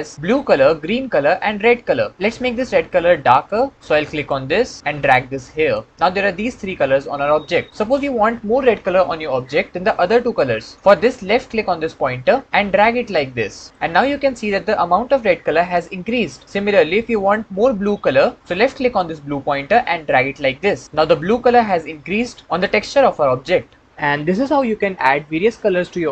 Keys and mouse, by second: 4.0 click, 12.0-13.7 drag, 19.0-20.8 drag.